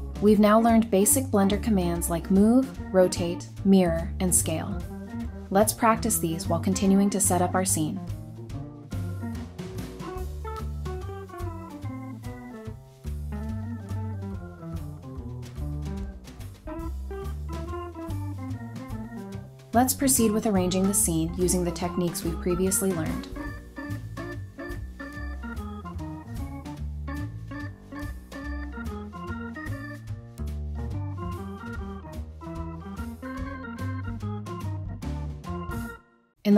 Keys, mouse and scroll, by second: 0.6 typing, 2.5-5.9 typing, 5.6 Escape, 7.9 typing, 10.7 typing, 12.2 scroll down 1, 13.5-18.8 typing, 15.2 shift+click, 17.9 double click, 18.9 scroll down 1, 19.0 middle click, 19.8 scroll up 1, 20.4-21.4 typing, 21.9 scroll up 1, 22.2 double click, 23.1-24.8 typing, 23.8 Return, 25.9 scroll up 1, 26.2-27.6 typing, 28.8 typing, 31.1 scroll down 1, 31.3 middle click, 31.8 scroll down 1, 31.9 middle click, 32.3 scroll up 1, 32.5 typing, 35.0 middle click, 35.2 scroll up 1, 35.3 Tab, 36.1-36.5 typing.